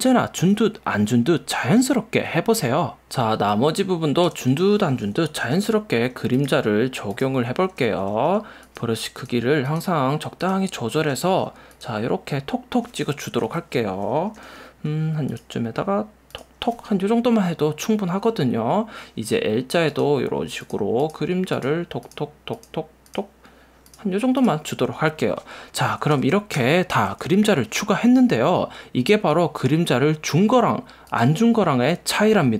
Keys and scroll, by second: 3.3 space, 5.5 [, 11.1 ], 13.6 super+z, 14.5 [, 26.2 alt+super+0, 26.7 super+=, 27.5 v.